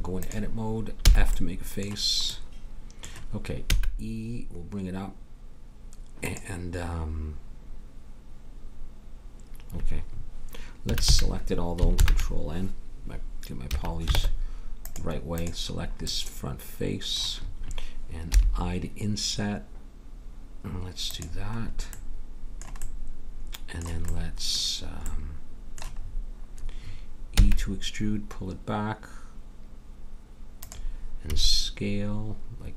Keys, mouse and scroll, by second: 1.0 f, 3.7 e, 10.8 a, 11.0 a, 11.9 ctrl+n, 13.6 a, 14.1 ctrl+Tab, 18.3 i, 22.0 middle click, 27.3 e, 31.3 s.